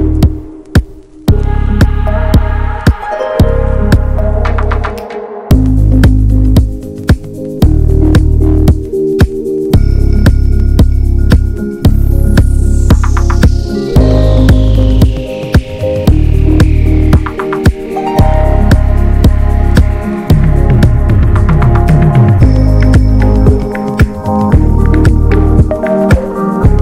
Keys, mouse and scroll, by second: 0.0 alt+z, 0.1 click, 0.5 alt+z, 0.8-1.8 drag, 1.8 r, 2.9 click, 3.7 scroll down 2, 3.9 scroll up 1, 4.1 alt+z, 4.8 click, 6.3 click, 7.1 alt+z, 7.3 Tab, 7.4 click, 7.5-8.3 scroll down 4, 7.7 shift+middle click, 8.3 ctrl+s, 8.4 click, 8.6 scroll down 1, 8.7 shift+middle click, 9.6 click, 9.8 Tab, 10.0 alt+z, 10.1-10.5 scroll up 1, 10.5 click, 11.4 s, 12.2 s, 13.6 alt+middle click, 13.8 alt+z, 14.0 Tab, 14.1 click, 14.3 shift+middle click, 14.4 scroll up 1, 14.6 middle click, 15.7 Tab, 15.9 alt+z, 16.1 shift+middle click, 17.0 Tab, 17.1 click, 17.4 ctrl+s, 17.6 alt+z, 17.9 shift+middle click, 18.4 scroll up 1, 18.5 Tab, 18.7 middle click, 19.4 alt+middle click, 20.0 Tab, 20.3 ctrl+a, 20.6 shift+middle click, 21.0 ctrl+s, 21.2 click, 21.7 Tab, 21.9 click, 22.5 3, 22.6 click, 22.9 middle click, 23.3 shift+d, 24.2 click, 24.5 shift+middle click, 25.6 s.